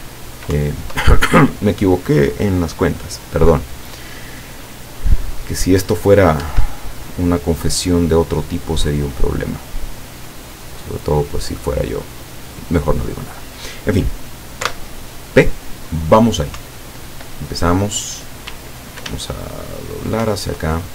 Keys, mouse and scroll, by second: 0.6 Up, 6.5 Escape, 9.7-13.0 drag, 14.7 p, 16.6 Up, 18.6 w, 19.2 s, 20.3 Up.